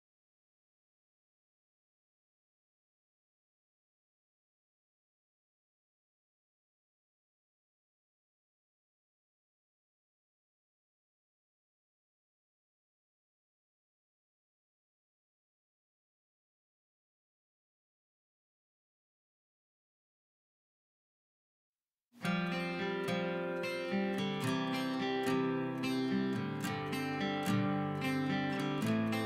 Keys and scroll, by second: 1.6 p, 2.2 Escape, 2.7 p, 4.0 Escape, 5.0 Escape, 5.1 Escape, 5.2 Escape, 6.9 alt+h, 9.0 Delete, 9.6-11.6 typing, 13.8 m, 20.0 m, 21.3-24.2 typing, 23.1 Delete, 26.0-27.1 typing, 27.1 Delete, 28.2 Delete, 29.0 m.